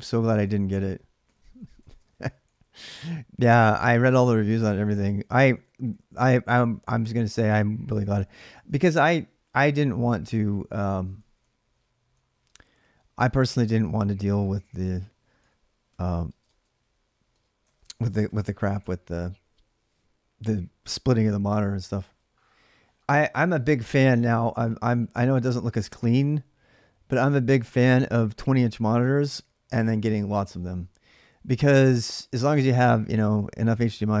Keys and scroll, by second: 1.4-7.3 typing, 3.7 Return, 8.1 ctrl+[, 8.3-16.3 typing, 17.5 ctrl+[, 17.5-18.3 typing.